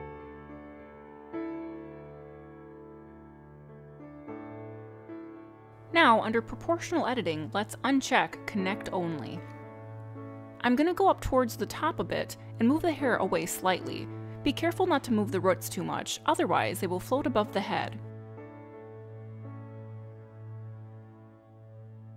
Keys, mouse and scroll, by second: 1.4 g, 5.4 middle click, 8.2 click, 11.7 middle click, 13.4 shift+middle click, 13.8-14.1 scroll up 5, 14.4 middle click, 19.2 middle click, 19.9 click, 20.5 click, 21.0 click, 21.4 middle click, 21.9 scroll down 1.